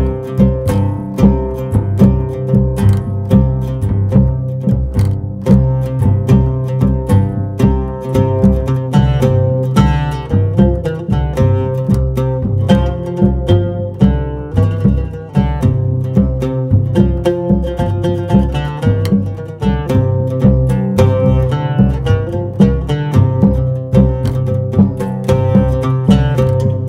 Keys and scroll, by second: 0.5 g, 6.2 s, 8.3 s, 9.7 KP_1, 10.7 Tab, 12.5 ctrl+b, 16.3 ctrl+b, 19.0 KP_1, 25.3 shift+a.